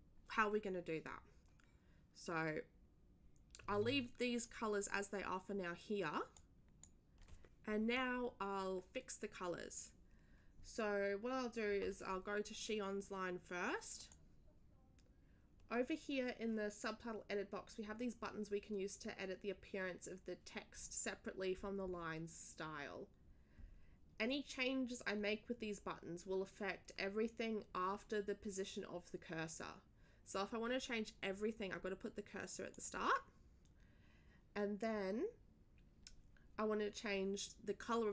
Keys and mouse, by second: 6.3 click, 14.0 click, 32.7 click.